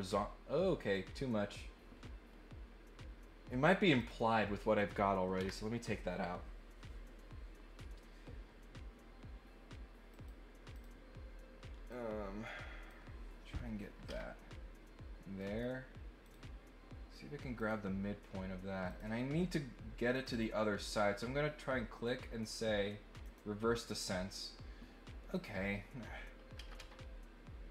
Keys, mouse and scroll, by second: 3.9 click, 10.1 click, 10.7 click, 11.8-12.8 drag, 14.1 Escape, 15.4 right click, 16.2 click, 17.5 click, 18.8 click, 20.1 click, 20.3 click, 23.2 click, 25.3 click.